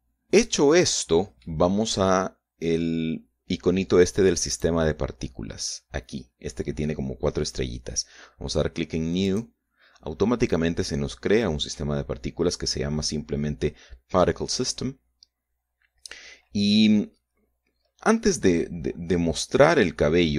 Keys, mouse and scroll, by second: 0.5-2.3 middle drag, 5.2 click, 9.9 click.